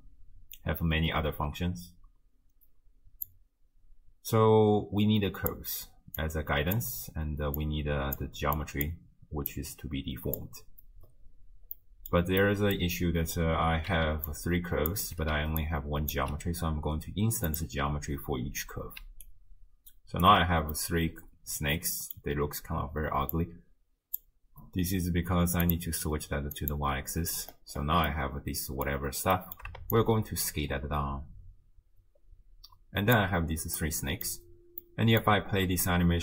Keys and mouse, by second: 3.3-5.5 drag, 6.2-6.8 drag, 7.6-8.2 drag, 8.6 click, 9.5-10.4 drag, 11.8 middle click, 12.4 click, 13.9 d, 14.3 click, 14.9-16.3 typing, 15.6 click, 17.5 click, 19.0 d, 19.3-20.3 drag, 20.3 d, 20.9-22.2 drag, 20.9 d, 23.4 click, 25.7-26.7 drag, 28.1-28.9 drag, 29.4 click, 29.9-33.2 shift+drag, 33.9 click, 34.9 click, 35.9-36.2 shift+drag.